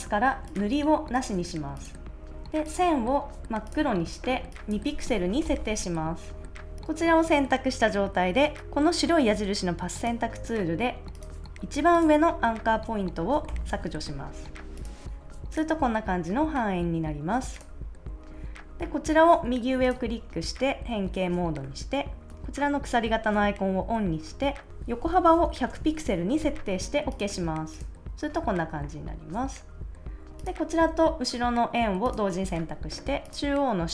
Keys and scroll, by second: 5.0 2, 5.4 Return, 13.4 BackSpace, 24.8-25.7 typing.